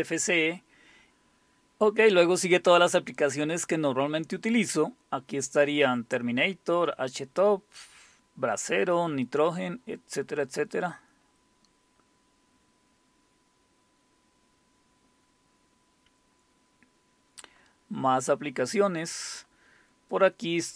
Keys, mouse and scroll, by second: 0.6-1.1 scroll down 1, 3.3-4.9 scroll down 2, 4.9-5.9 scroll down 1, 10.2-10.9 scroll down 2, 10.9-11.6 scroll down 1, 11.6-12.7 scroll down 1, 12.7-13.9 scroll down 1, 13.9-15.6 scroll down 1, 16.0-17.1 scroll down 2, 17.1-17.9 scroll down 1, 17.9-19.5 scroll down 1, 20.1-20.7 drag.